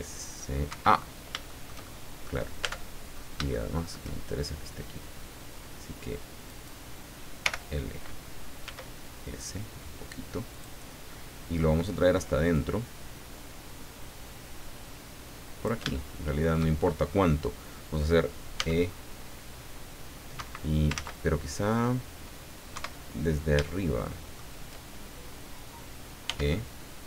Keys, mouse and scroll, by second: 0.7 Escape, 1.0 scroll down 2, 1.5 shift+middle click, 2.6 shift+Tab, 3.1-3.5 shift+scroll up 4, 3.5 shift+middle click, 6.5 right click, 7.4 l, 8.6 s, 10.5 click, 11.1 middle click, 12.5-15.8 drag, 15.9 shift+middle click, 15.9 shift+click, 18.5 e, 20.3 Escape, 20.9 ctrl+z, 22.7 KP_7, 23.6 shift+middle click, 26.2 e.